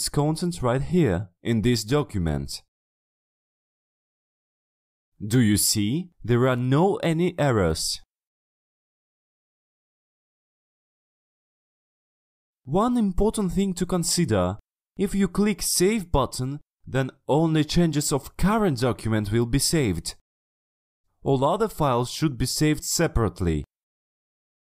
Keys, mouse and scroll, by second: 0.7 click, 1.3 middle click, 2.4 scroll down 2, 3.2 click, 4.2 click, 5.6 click, 6.7 click, 8.2 click, 8.4-8.7 scroll down 1, 8.7 click, 9.6 click, 10.1 click, 10.5 click, 11.5 scroll up 1, 12.2 click, 12.6 click, 15.0 click, 16.2 click, 17.1 click, 17.9 click, 18.5 click, 20.1 click, 23.5 click.